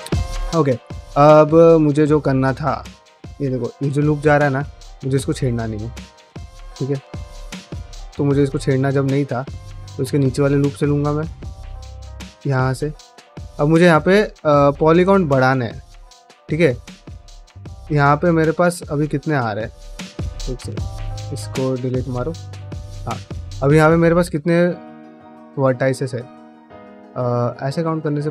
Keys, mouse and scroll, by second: 0.0 middle click, 0.5 shift+middle click, 0.7-2.3 middle drag, 2.4 3, 2.9 alt+click, 3.4-5.0 middle drag, 5.3 1, 5.6 click, 5.7 g, 7.3 click, 7.5 g, 8.1 click, 8.3 g, 9.0 click, 9.6 middle click, 9.8 3, 10.4 alt+click, 10.7-11.9 middle drag, 12.4 1, 12.6 click, 12.8 middle click, 13.1 g, 13.8 click, 14.0 g, 14.5 click, 15.1 click, 15.2 g, 15.8 click, 15.9 g, 16.4 click, 16.6 g, 16.9 middle click, 17.3 click, 17.5 g, 17.7 middle click, 18.7 click, 18.8 f, 19.6 ctrl+right click, 20.2 ctrl+z, 20.5 ctrl+z, 20.9 ctrl+z, 21.3 3, 21.6 1, 21.8 click, 22.0 x, 22.6 middle click, 23.1 1, 23.4 click, 23.6 middle click, 24.2 ctrl+click, 24.7 ctrl+click, 25.0 ctrl+click, 25.4 middle click, 26.6-27.7 middle drag, 27.9 middle click.